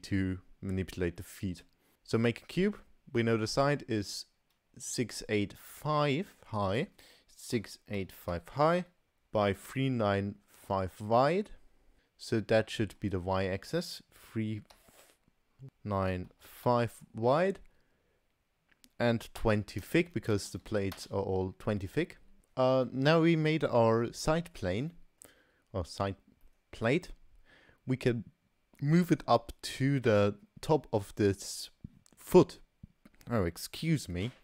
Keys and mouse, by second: 1.2 middle click, 1.9 a, 6.8-22.2 drag, 20.5 BackSpace, 22.4-22.7 middle drag, 24.3 middle drag, 24.9-25.3 shift+middle drag, 26.5-26.9 middle drag.